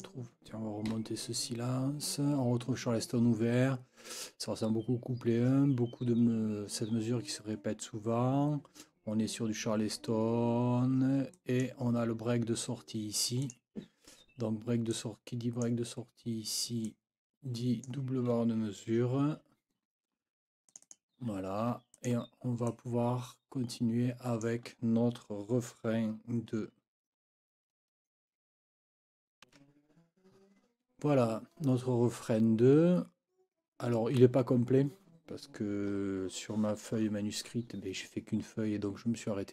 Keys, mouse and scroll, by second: 0.9 Up, 11.3 click, 13.4 click, 14.9 click, 16.8-18.0 drag, 19.4 F9, 20.7 click, 21.3 F9, 21.9 click, 22.7 click.